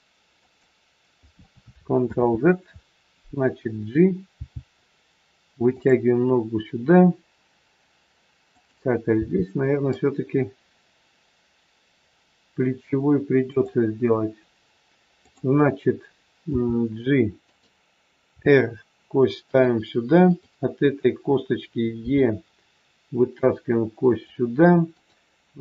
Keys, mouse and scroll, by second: 1.7 ctrl+click, 2.1 ctrl+z, 4.2 g, 8.5 click, 9.1 g, 15.2 click, 16.5 g, 18.2 r, 20.2 click, 21.9 e, 24.9 click.